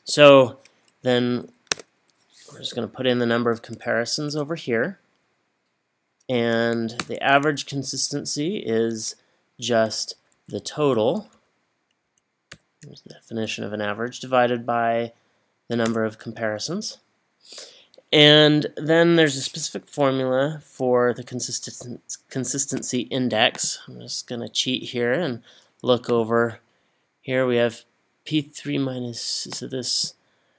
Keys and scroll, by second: 1.7 3, 4.3 Return, 7.0 =, 10.2 Left, 10.7 Left, 11.2 Down, 11.3 Down, 12.0 Down, 13.3 Up, 15.9 Return.